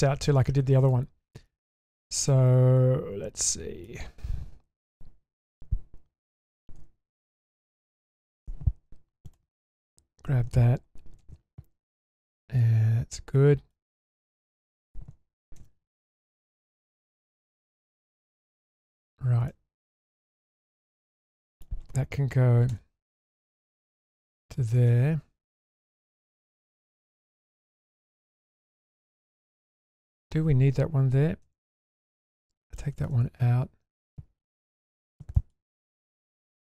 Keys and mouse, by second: 0.2 shift+middle click, 0.9 middle click, 2.3-3.9 middle drag, 6.8 2, 7.5 click, 9.3 click, 9.8 shift+click, 11.2 ctrl+x, 11.9-13.7 middle drag, 15.6 ctrl+x, 15.9-18.4 middle drag, 19.5-21.6 middle drag, 22.7 k, 25.9 middle click, 26.9 alt+click, 28.6 shift+middle click, 29.3 middle click, 31.4 ctrl+x, 32.2 middle click, 32.8 shift+middle drag, 34.1 shift+middle drag, 35.3 shift+middle click.